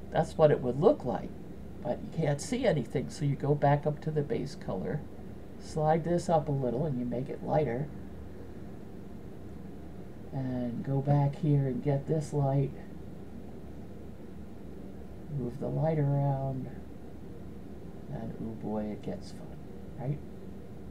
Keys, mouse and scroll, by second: 2.8 click, 13.5-15.2 drag, 16.2-20.8 drag.